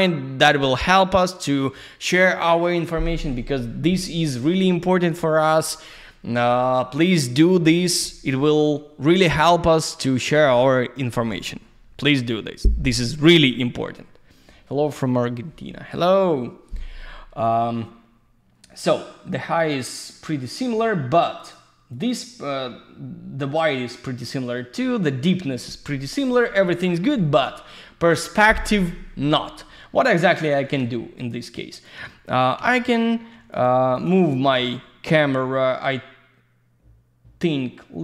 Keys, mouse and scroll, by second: 10.1 click, 21.4 click, 21.9 click, 30.2 alt+middle click, 31.2 click, 31.7 click, 32.2 click, 33.3 q, 33.5 click, 33.9 click, 35.2 w, 37.5 click.